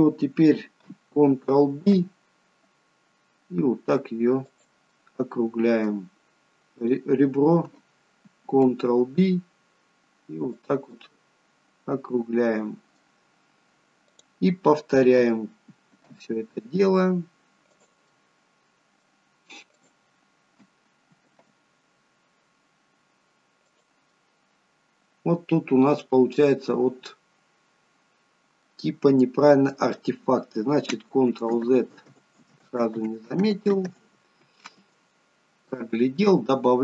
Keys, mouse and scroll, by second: 1.9 ctrl+b, 5.0 middle click, 6.9 click, 8.6 ctrl+b, 11.1 middle click, 14.2 click, 16.1 ctrl+b, 18.2 middle click, 19.8 click, 21.4 ctrl+b, 24.2 middle click, 28.8 middle click, 31.3 ctrl+z, 31.8 ctrl+z, 35.5 ctrl+z, 35.5 scroll up 1, 35.8 middle click.